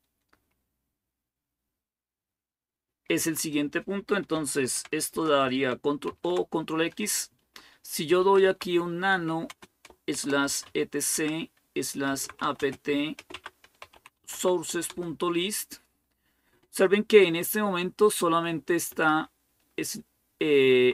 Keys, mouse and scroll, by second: 3.2-4.4 drag, 4.4 ctrl+o, 4.9 Return, 5.9 ctrl+x, 7.8-14.5 typing, 13.1 Tab, 14.7 Return, 16.0-16.7 typing, 18.0 Down, 18.7 Up, 20.4 Right, 20.6 Right, 20.8 Right.